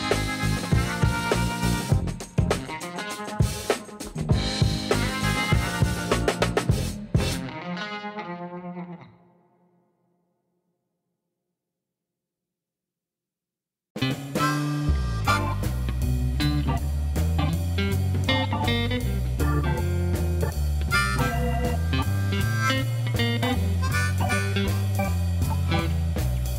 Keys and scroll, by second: 3.2 Tab, 4.1 ctrl+a, 5.2 shift+m, 5.4 u, 6.4 space, 6.8 shift+b, 6.9 a, 7.6 Tab, 8.4 alt+a, 15.4 ctrl+s, 21.8 shift+a, 24.6 Tab, 25.4 s, 26.1 Return.